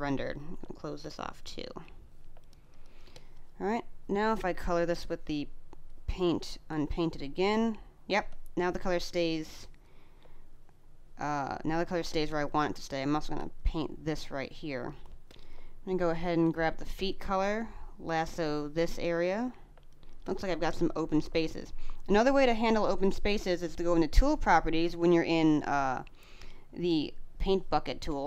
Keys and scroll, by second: 2.2 space, 7.9 space, 11.9 space, 14.2 space, 16.7 space, 19.6 space.